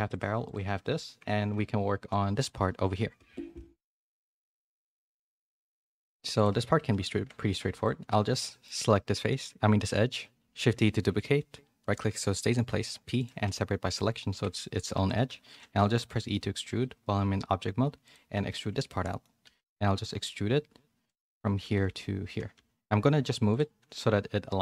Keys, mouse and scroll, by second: 0.1 click, 0.4 click, 5.0 a, 5.2 shift+middle click, 5.8 middle click, 7.1 Tab, 7.5 2, 8.0 middle click, 10.5 shift+d, 12.7 p, 13.4 Tab, 13.9 click, 14.5 a, 14.9 e, 19.0 middle click, 19.4 e.